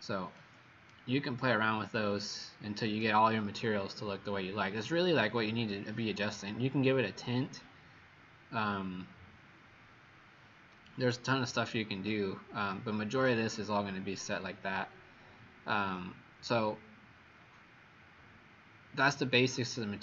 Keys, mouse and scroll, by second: 0.3 click, 12.3 scroll down 2.